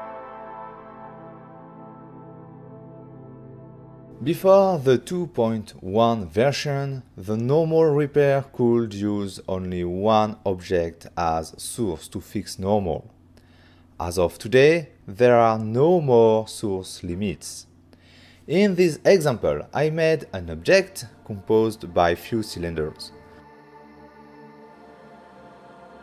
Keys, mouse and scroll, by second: 1.1 click, 1.4 f, 1.7 click, 2.1 c, 2.2 right click, 2.6 click, 3.1 click, 3.8 click, 4.4 click, 5.2 Right, 5.2 Left, 5.4 Return, 5.5 Return, 5.7 right click, 5.9 click, 6.2 1, 6.5-6.9 scroll up 5, 6.9 f, 7.5 click, 7.7 right click, 8.3 w, 8.7 c, 9.0 click, 9.8 click, 10.4 click, 10.6 scroll down 5, 10.8 middle click, 11.5 ctrl+middle click, 12.5 right click, 13.0 3, 13.4 scroll up 4, 13.6 f, 14.0 click, 14.2 right click, 14.7 c, 15.0 click, 16.3 click, 17.0 click, 17.3 middle click, 17.6 ctrl+middle click, 18.1 middle click, 18.4 click, 19.3 c, 19.8 c, 20.4 click, 21.1 right click, 21.4 f, 21.8 click, 22.4 c, 22.9 click, 23.6 click, 24.8 c, 25.3 click, 25.6 right click.